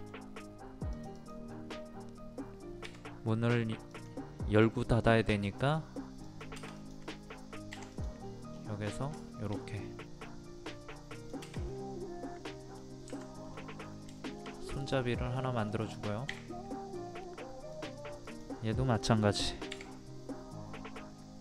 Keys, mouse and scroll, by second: 0.3-0.9 scroll up 1, 0.9 click, 1.5 scroll up 1, 3.9-5.0 drag, 8.5 scroll down 1, 9.2 shift+middle click, 11.1 click, 11.7 middle click, 13.1 Escape, 13.5 middle click, 13.8 scroll down 1, 14.0 scroll up 1, 14.2 shift+middle click, 14.6-15.0 scroll up 1, 15.4 middle click, 15.9 click, 16.5 middle click, 17.7 click.